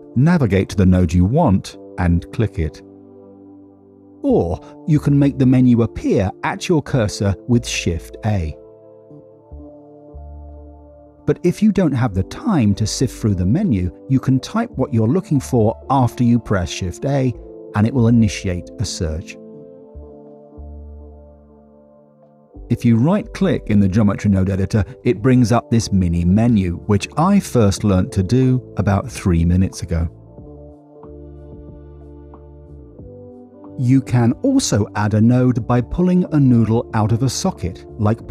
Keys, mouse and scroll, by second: 3.8 click, 4.9 middle click, 5.9 middle click, 7.8 shift+a, 9.8 shift+a, 12.3 click, 12.8 click, 14.6 middle click, 15.3 middle click, 16.3 shift+a, 17.6 BackSpace, 23.5 middle click, 24.2 middle click, 26.5-31.0 right drag, 32.1 click, 34.2 middle click, 34.9 middle click, 37.5 click.